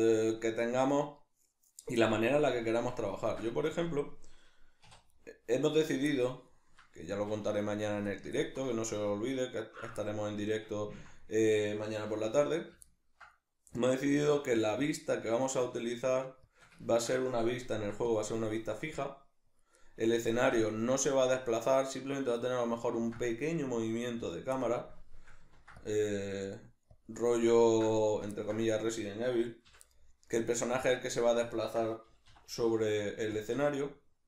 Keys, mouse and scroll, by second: 3.7 Tab, 5.1 right click, 5.8 ctrl+right click, 6.1-7.1 middle drag, 7.1 shift+right click, 7.5 ctrl+right click, 7.7 ctrl+right click, 8.1-12.7 ctrl+middle drag, 12.3 shift+d, 12.7 right click, 12.9-16.5 ctrl+middle drag, 14.1 alt+e, 16.5 shift+click, 16.8 ctrl+middle click, 17.7 ctrl+r, 19.6 click, 19.8 middle click, 20.3 ctrl+r, 22.6 click, 22.9 ctrl+r, 24.3 click, 24.6-27.0 middle drag, 25.5 ctrl+r, 27.0 click, 27.2-28.7 middle drag, 28.7 right click, 29.7 l, 29.9-32.1 middle drag, 32.1 g, 33.4 shift+click, 33.5 middle click.